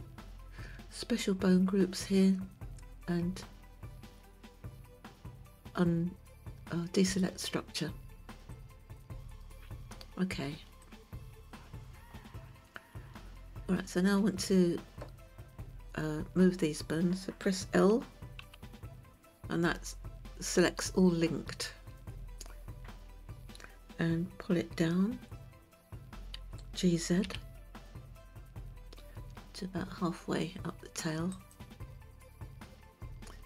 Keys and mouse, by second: 8.5 click, 10.8 click, 18.4 l, 26.4 g.